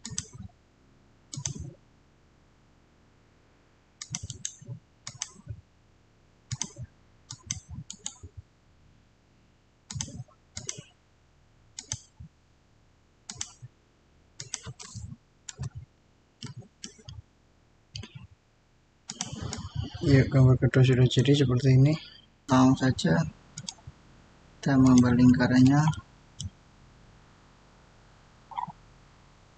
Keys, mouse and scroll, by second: 3.8 click, 3.9 click, 4.1 right click, 4.9 click, 7.7 right click, 9.8 click, 16.3 middle click, 16.5 scroll down 1, 19.0-22.4 drag, 23.4 alt+Tab, 23.5 click, 25.8-27.9 middle drag, 27.9 scroll up 1.